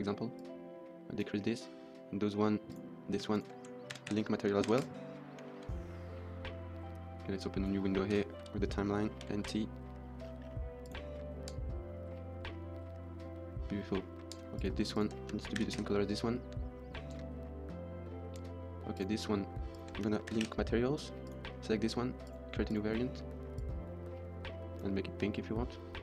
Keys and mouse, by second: 0.3 click, 1.4 middle drag, 2.5 middle click, 2.7 click, 3.2 shift+click, 3.8 ctrl+l, 4.6 ctrl+s, 4.7 KP_0, 5.4 shift+middle click, 7.3 click, 9.1 n, 9.3 t, 10.7 click, 11.3 space, 14.2 space, 14.5 click, 14.8 shift+click, 15.6 ctrl+l, 15.6 space, 17.0 space, 18.2 space, 18.7 click, 19.7 shift+click, 20.4 ctrl+l, 21.1 click, 22.2 click, 22.5 click.